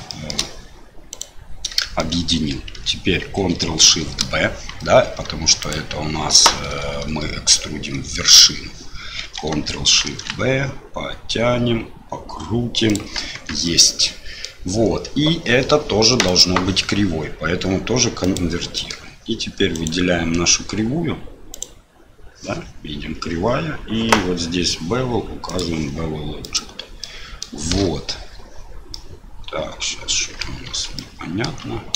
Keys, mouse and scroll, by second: 0.1 shift+middle click, 1.1 click, 1.8 shift+middle click, 5.6-8.8 drag, 10.0 ctrl+shift+b, 13.3 Tab, 13.6 middle click, 16.2-18.4 drag, 18.7 middle click, 19.7 click, 21.5 click, 25.4 click, 27.0 middle click, 28.9-30.4 middle drag, 30.6 Tab, 30.9 middle click, 31.4 Tab.